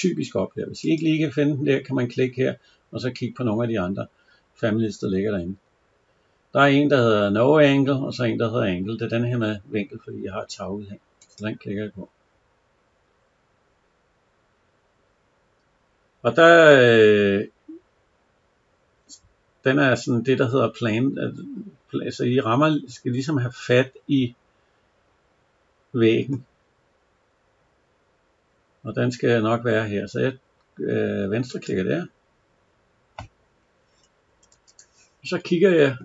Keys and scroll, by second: 34.1 Escape.